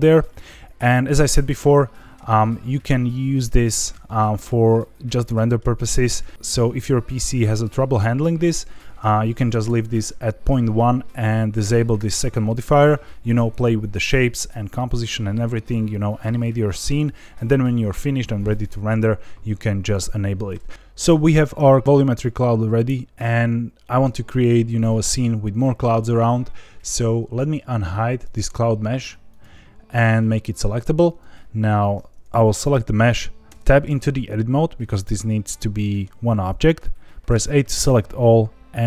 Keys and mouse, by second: 0.2-1.0 middle drag, 5.3 middle click, 8.6-10.0 drag, 11.9 click, 28.2 click, 29.2 click, 33.5 Tab, 35.5 middle click, 37.2 a.